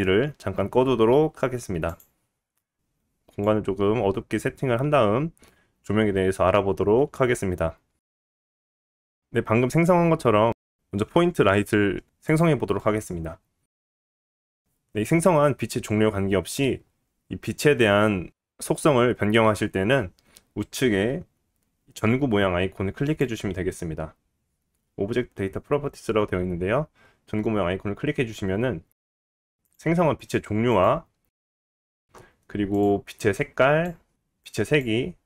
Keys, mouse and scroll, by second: 2.2-6.8 middle drag, 8.2 click, 8.5 x, 8.8 shift+a, 9.4 shift+a, 10.8 g, 12.5 g, 23.0 click, 29.2 click, 30.4 click, 31.0 click, 31.6-32.7 middle drag, 32.7 click, 35.1-35.2 drag.